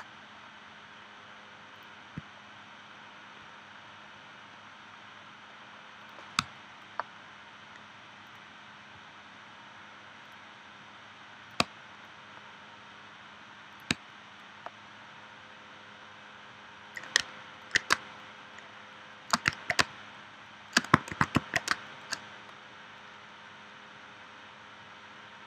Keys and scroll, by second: 6.4 space, 11.6 space, 13.9 space, 18.0 space, 19.8 space, 21.1 shift+c, 21.7 space.